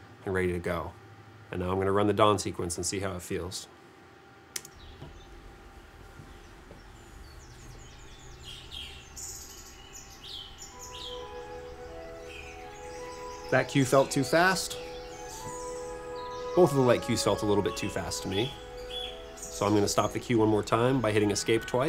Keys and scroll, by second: 4.6 space.